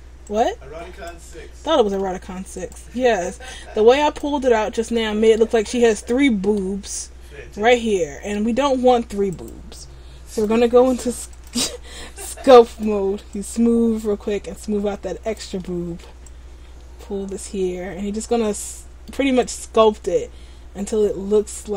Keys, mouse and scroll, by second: 0.4 click, 1.4 middle click, 2.8 right click, 3.6 click, 4.5 middle click, 6.1 middle click, 7.3-7.7 scroll up 2, 7.7 middle click, 9.4 click, 11.5 click, 13.5 click, 15.7 middle click, 16.1 scroll up 1, 16.4 click, 18.7 middle click, 19.5 click.